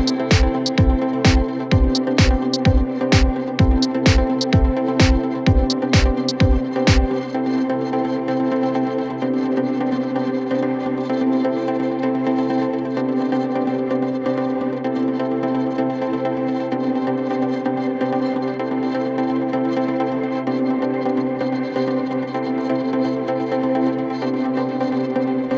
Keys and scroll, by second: 7.2 shift+Home, 7.4 shift+Up, 8.7 2, 8.9 0, 9.3 shift+5, 9.5 Return, 10.6 o, 11.0 BackSpace, 11.2 Caps_Lock, 11.4 o, 11.8 f.